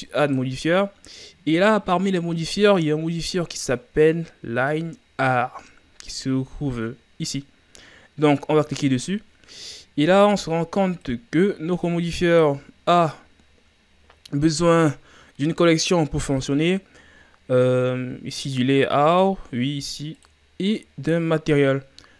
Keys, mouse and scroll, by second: 0.3 click, 11.1-14.1 drag, 18.4-21.4 drag.